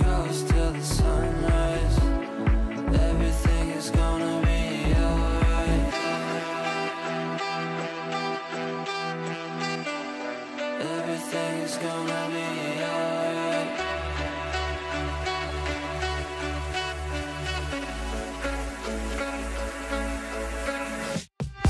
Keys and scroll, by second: 1.0 l, 6.9 l.